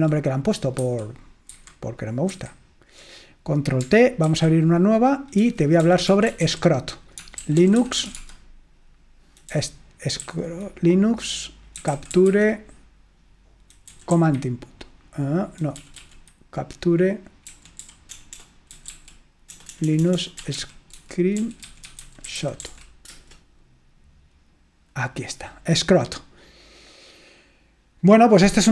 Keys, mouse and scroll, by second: 0.8 super+1, 1.6 super+7, 2.3 super+8, 4.5 ctrl+t, 5.3-8.6 typing, 9.6 Down, 10.2 Up, 11.6-12.8 typing, 14.0 Down, 14.1 Down, 15.9 typing, 17.4-23.2 typing, 27.5 click.